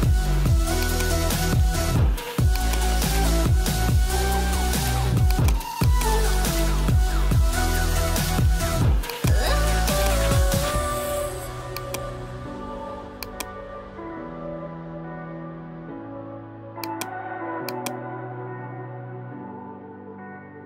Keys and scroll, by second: 15.0 alt+BackSpace, 19.6 ], 20.4 [.